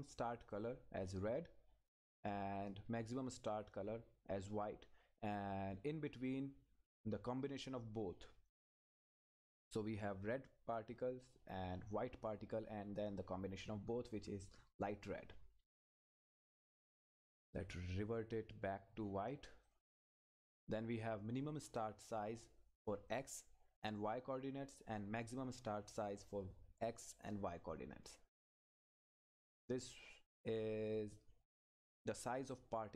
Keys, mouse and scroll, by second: 0.5 click, 1.9-3.8 scroll down 1, 8.6-10.2 scroll up 1, 19.6 click, 30.7-31.3 scroll up 1, 31.3 scroll down 1, 32.0 click, 32.6-32.9 scroll down 1.